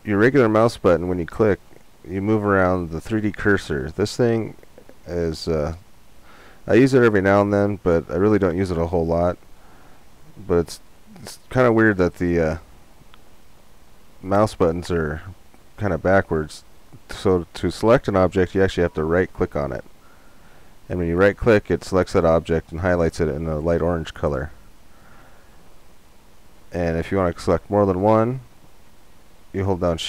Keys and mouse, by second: 9.3-12.3 drag, 13.5-15.3 right drag, 16.6-18.4 right drag, 19.1-24.1 right drag, 25.9 right click, 27.4-30.0 right drag.